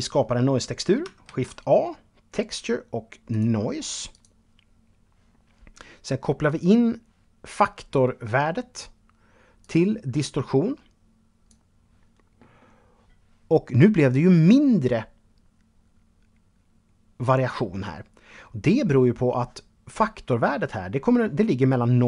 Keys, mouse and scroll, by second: 0.4 shift+a, 2.5 click, 3.3 click, 8.8 click.